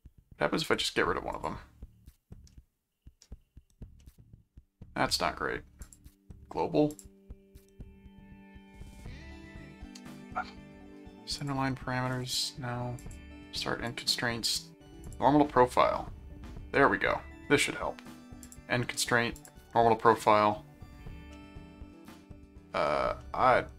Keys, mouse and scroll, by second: 0.6 right click, 1.3 click, 2.5 middle click, 4.0 middle click, 5.8 click, 6.9 click, 11.4 click, 12.1 click, 13.0 click, 13.8 click, 15.0 click, 18.4 click, 19.4 click, 21.4 middle click, 23.2-23.7 middle drag.